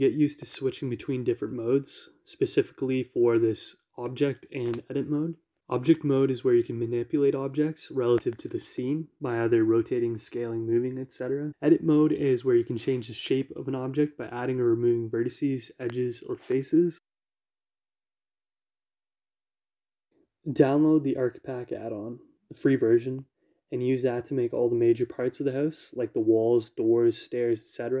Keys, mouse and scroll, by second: 0.1 x, 3.4 Escape, 3.6 r, 5.0 y, 7.5 g, 10.0 shift+z, 11.4 Escape, 14.2 click, 15.7 click, 17.8 g, 19.7 click, 20.9-25.5 shift+middle drag, 25.5 a, 26.4 q, 26.6-27.0 shift+middle drag, 27.1-28.0 shift+middle drag.